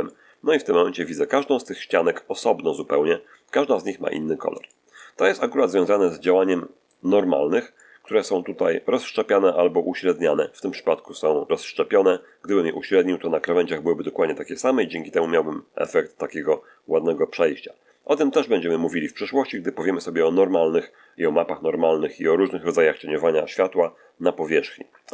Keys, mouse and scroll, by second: 4.0-4.3 scroll up 1, 4.5 shift+middle click, 5.5 shift+scroll down 1, 5.9-6.9 middle drag, 7.6 shift+middle click, 15.7 click.